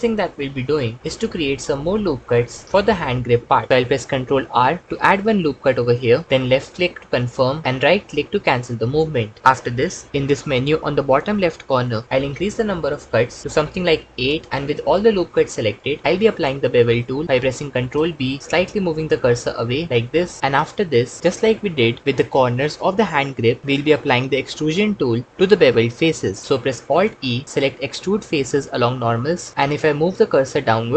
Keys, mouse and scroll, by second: 4.3 ctrl+r, 9.0 middle click, 12.4 click, 13.4 click, 15.2 middle click, 17.8 ctrl+b, 20.4 ctrl+Return, 26.8 alt+e.